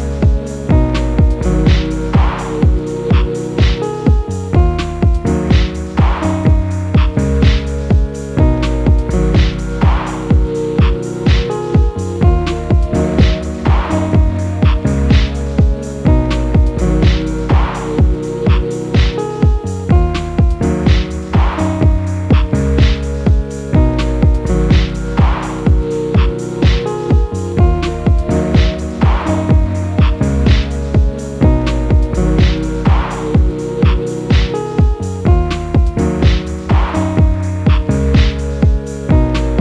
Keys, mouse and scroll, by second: 0.4 shift+z, 0.9 shift+z, 1.7 click, 2.2-3.5 middle drag, 3.5 a, 3.7 middle click, 4.1 click, 5.4 click, 5.7 click, 6.2-7.5 middle drag, 7.5 a, 7.9 click, 9.1 click, 9.4 click, 9.7-12.2 middle drag, 12.2 a, 12.5 click, 13.6 click, 14.0 click, 14.5-15.9 middle drag, 15.9 Tab, 16.1 click, 16.6-18.3 middle drag, 18.3-18.8 scroll down 2, 18.8 /, 19.2-20.4 scroll up 2, 21.3 a, 22.1 /, 22.5 /, 23.1 ctrl+z, 23.4 click, 24.8 click, 25.4 g, 27.4 click, 27.9 g, 29.2-29.7 middle drag, 29.7-30.2 scroll up 3, 30.2 click, 30.4 scroll up 3, 30.7-32.7 middle drag, 32.7 r, 36.0 s, 38.7-39.6 drag.